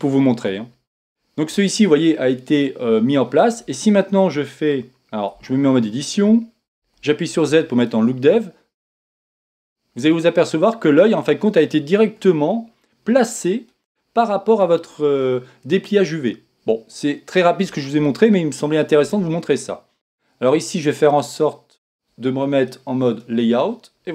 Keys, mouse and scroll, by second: 6.3 Tab, 8.3 z, 9.3-21.5 middle drag, 23.4 click.